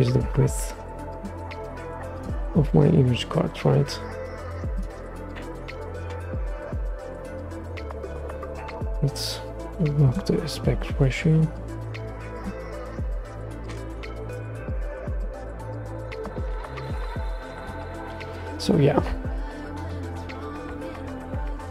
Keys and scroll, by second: 5.6-6.8 typing, 7.4 super+z, 13.3-13.9 typing, 14.2 Return, 20.7 super+s.